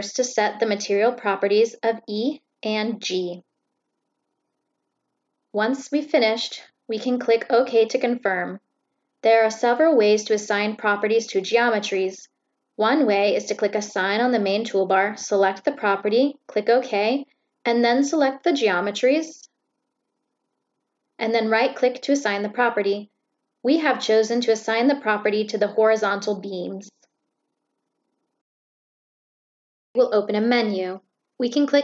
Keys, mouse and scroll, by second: 2.1 click, 8.1 click, 9.9 click, 13.1 click, 14.7 click, 15.9 click, 17.2 click, 19.1 click, 19.7 click, 20.5-20.8 drag, 26.2 click, 29.5 click, 29.7 right click, 31.4 click.